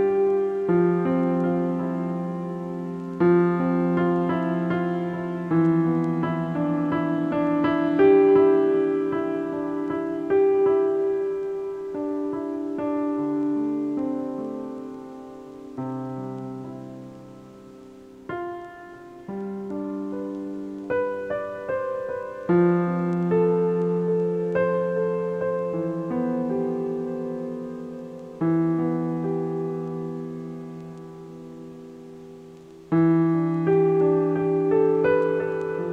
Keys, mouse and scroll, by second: 1.9-4.1 shift+middle drag, 4.1 click, 12.0-15.0 drag, 16.3 click, 17.8 click, 19.1-20.1 drag, 24.2 ctrl+1, 25.3-25.9 scroll up 3, 26.4 click, 27.9-29.1 drag, 30.2-31.5 drag, 33.0 click, 34.7-35.7 drag.